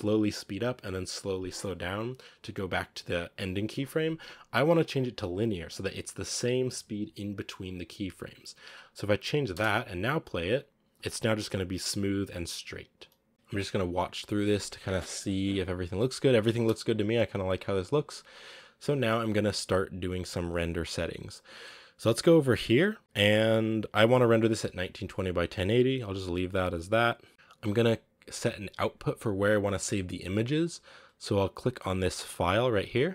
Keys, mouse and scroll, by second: 9.4 space, 13.2 space, 13.3 z, 16.4 space, 16.8 click.